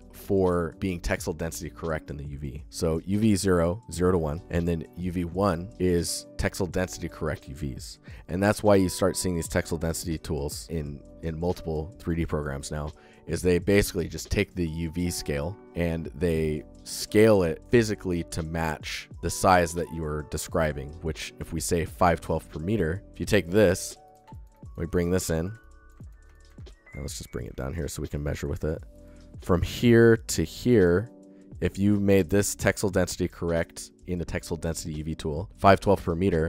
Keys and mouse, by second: 12.1 alt+shift+middle click, 12.4-13.2 alt+shift+middle drag, 14.8 alt+shift+middle drag, 15.1 alt+middle click, 23.1 g, 23.9 click, 24.1 ctrl+alt+click, 24.4 alt+click, 25.2 click, 25.4 alt+click, 25.8 ctrl+alt+click, 26.2 alt+shift+click, 27.2 click, 27.4 ctrl+alt+click, 27.6 click, 28.0 ctrl+alt+click, 28.1 alt+click, 28.4 alt+shift+drag, 28.8 alt+click.